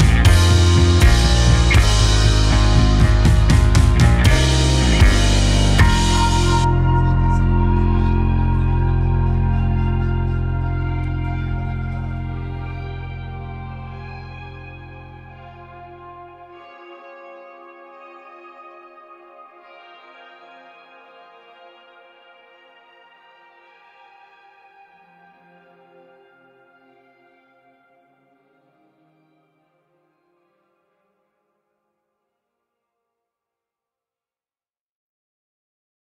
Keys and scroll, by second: 1.6 KP_8, 1.8 KP_0, 2.2 space, 8.8 space, 13.0 ctrl+h, 14.7 ctrl+h, 15.4 ctrl+h, 16.1 space, 27.3 space, 29.8 z, 33.7 Delete, 34.9 Delete.